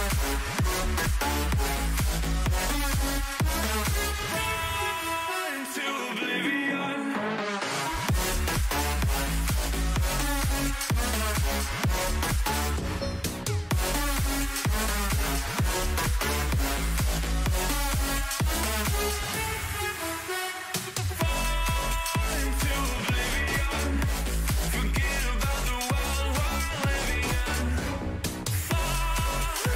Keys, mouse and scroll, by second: 0.9 b, 2.5 g, 10.4 a, 11.2-13.1 middle drag, 16.8 b, 17.4-18.4 drag, 18.4 g, 21.1 a, 22.2 b, 23.6 g, 26.6 a, 28.3 ctrl+r, 29.6 a.